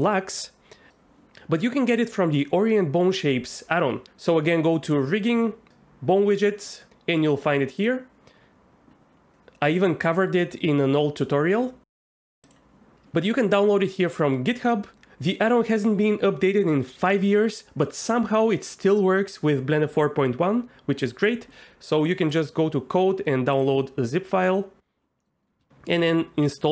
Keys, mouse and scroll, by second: 25.2 middle click, 26.5 ctrl+,.